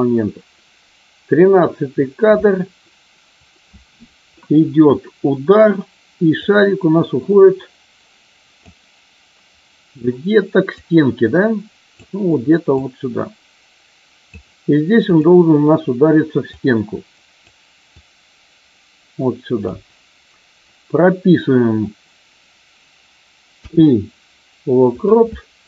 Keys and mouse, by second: 6.4-8.6 drag, 10.7-12.0 drag, 12.7-14.4 drag, 17.9-19.7 drag.